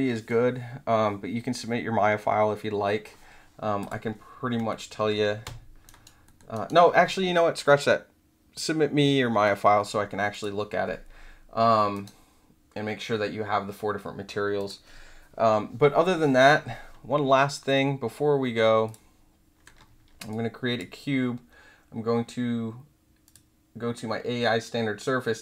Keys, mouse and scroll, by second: 3.7 click, 4.6 alt+middle drag, 5.8 alt+drag, 6.2 alt+middle drag, 6.5 alt+right drag, 10.3 click, 12.0 right click, 14.5 click, 18.8 click, 20.2 click, 23.2 click.